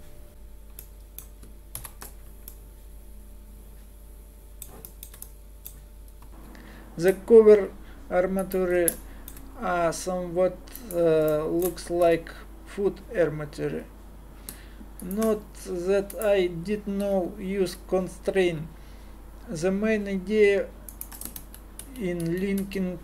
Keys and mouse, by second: 1.8 ctrl+Down, 6.3 r, 9.2 middle click, 11.3-13.3 middle drag, 12.0 r, 16.1 click, 17.0 r, 21.4 ctrl+z, 21.8 ctrl+z, 22.2 ctrl+z, 22.6 ctrl+z.